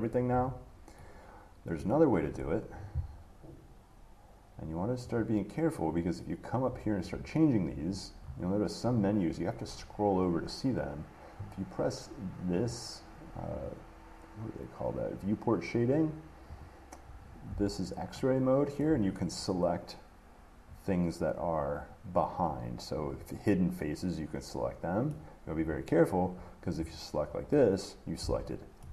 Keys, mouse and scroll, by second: 0.0 shift+click, 0.3 shift+click, 2.0 middle click, 5.3 click, 6.1 click, 6.9-8.1 scroll, 8.1-11.2 scroll, 12.8 click, 13.8 click, 16.8 click, 19.0 shift+middle click, 20.9 click, 25.3 middle click, 26.6 click, 28.4 shift+middle click.